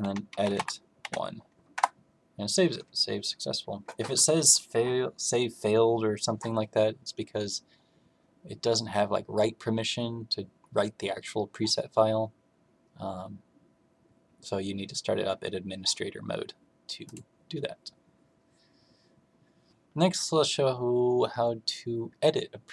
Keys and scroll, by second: 0.0-1.5 typing.